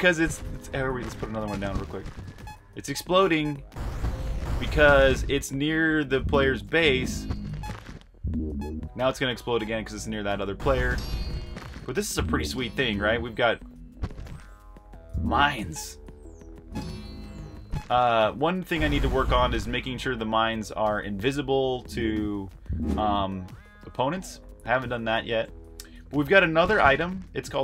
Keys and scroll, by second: 0.0-4.1 typing, 5.2-9.8 typing, 11.5-16.1 typing, 20.5-27.6 typing.